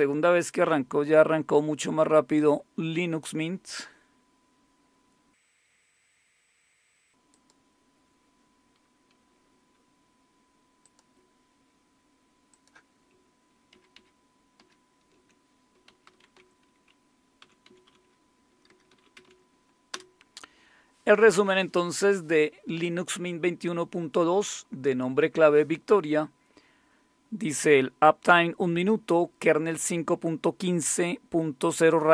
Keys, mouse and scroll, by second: 7.3 click, 7.9 click, 10.8 click, 12.5 click, 15.8-19.7 typing, 19.9 Return.